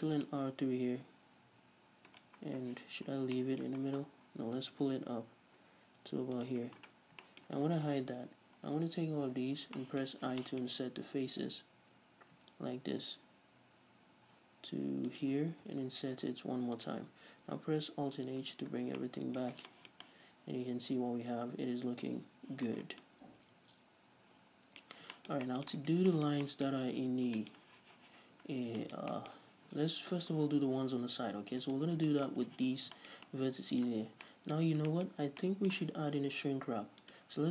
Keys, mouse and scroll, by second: 2.3 right click, 2.4 scroll down 1, 2.7 z, 3.1 scroll down 2, 3.4-31.7 middle drag, 3.9-4.3 scroll down 2, 4.3-4.8 scroll up 2, 4.8 g, 6.5 click, 6.7-7.3 scroll down 2, 8.0 h, 9.3 l, 10.1-10.5 scroll up 2, 11.4 i, 15.3 shift+click, 15.7 i, 17.0 shift+click, 17.5 alt+h, 18.3 scroll down 2, 18.4 a, 18.8 Tab, 18.9 scroll down 2, 19.6 scroll down 1, 22.9 scroll down 1, 24.9-25.2 scroll up 1, 25.8 right click, 27.0 Tab, 27.2 scroll down 2, 28.4-28.8 scroll up 1, 31.7 alt+right click, 32.1-37.1 shift+middle drag, 34.0 scroll down 1, 34.1 Tab, 34.6-34.9 scroll up 1, 35.2-35.5 scroll up 2, 37.1 click.